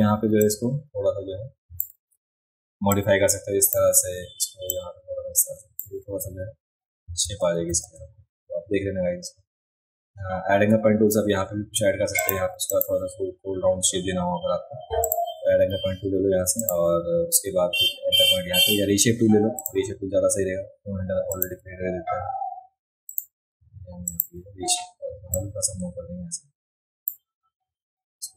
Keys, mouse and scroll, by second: 0.4 click, 2.0 ctrl+z, 2.9 click, 4.7 click, 7.3 ctrl+z, 7.7 ctrl+z, 12.2 click, 12.7 click, 15.0 click, 16.6 click, 19.6 click, 21.3 click, 23.1 click, 24.1 click, 25.4-27.1 drag.